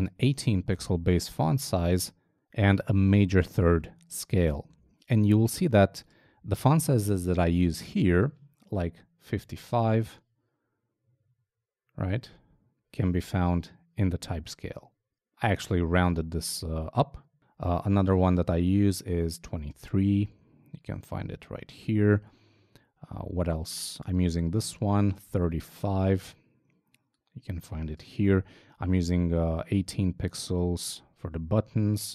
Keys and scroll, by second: 4.8 super+Tab, 9.9 super+Tab, 17.4 super+Tab, 19.7 super+Tab, 22.1 super+Tab, 25.4 super+Tab, 28.4 super+Tab.